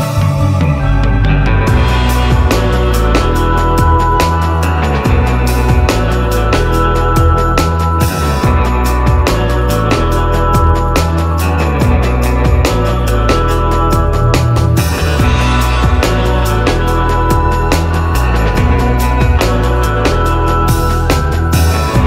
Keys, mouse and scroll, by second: 0.1-11.7 shift+drag, 12.8-13.1 scroll down 1, 13.8-15.8 drag, 15.8 scroll up 1, 16.8-18.4 drag, 18.4 scroll up 1, 20.5-22.0 drag.